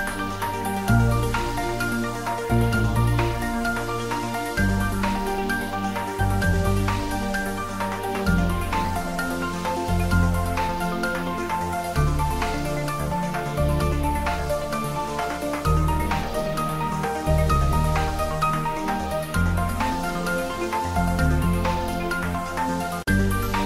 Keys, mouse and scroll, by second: 0.7 click, 1.1 click, 1.4 Tab, 1.9-9.7 typing, 2.9 click, 3.0 Tab, 3.8 Tab, 5.3 click, 6.1 click, 7.7 click, 8.8 click, 10.0 click, 10.3 ctrl+Tab, 10.5 ctrl+s, 11.9 click, 12.2 ctrl+s, 13.5 ctrl+s, 13.7 shift+middle click, 14.5 click, 15.4 ctrl+middle click, 15.6 shift+middle click, 16.3 ctrl+s, 17.0 click, 18.1 ctrl+s, 19.2 ctrl+middle click, 20.0 click, 20.4-21.3 typing, 21.6-23.2 ctrl+middle drag.